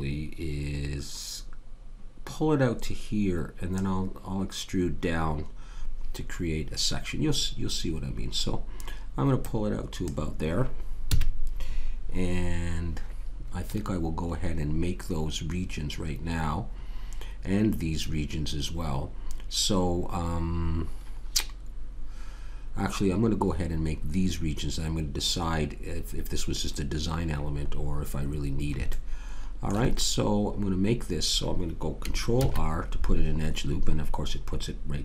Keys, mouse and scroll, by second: 9.4-11.1 middle drag, 11.1 a, 28.1-29.6 middle drag, 32.4 ctrl+r.